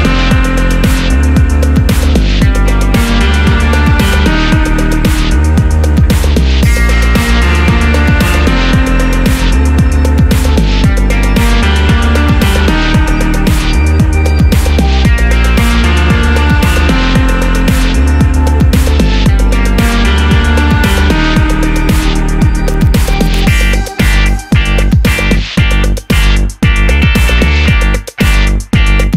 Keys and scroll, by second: 8.6 super+a.